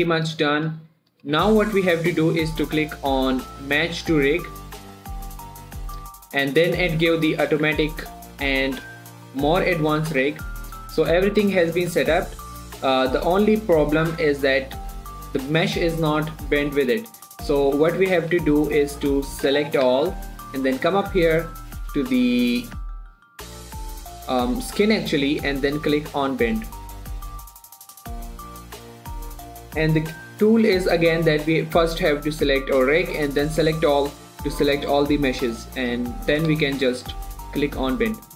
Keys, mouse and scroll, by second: 1.2 Tab, 4.6 click, 7.2 click, 8.0 Tab, 9.6 click, 10.3 r, 10.7 right click, 11.2 click, 11.4 g, 11.7 right click, 12.1 click, 12.2 scroll down 1, 12.4 shift+middle click, 12.6 g, 13.9 right click, 14.4 shift+middle click, 14.7 scroll up 1, 15.6 g, 15.9 right click, 16.9 click, 18.2-18.8 scroll down 1, 20.2 a, 21.2 click, 26.9 click.